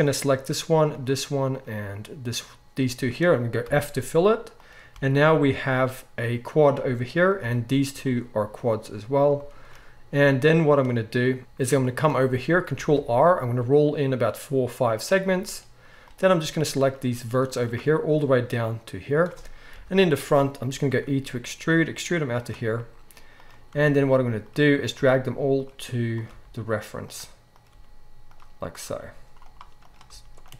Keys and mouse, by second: 3.6 f, 4.5 click, 4.9 g, 6.7-16.8 middle drag, 7.4 g, 12.7 ctrl+r, 16.8 ctrl+shift+click, 16.9-27.5 ctrl+shift+middle drag, 19.7 KP_1, 20.8 e, 23.6 g, 24.9 g, 26.2 g, 27.5 click, 27.6-28.8 middle drag, 27.7 g, 28.8-30.5 drag, 30.0 g, 30.4-30.5 middle drag, 30.4-30.5 right drag.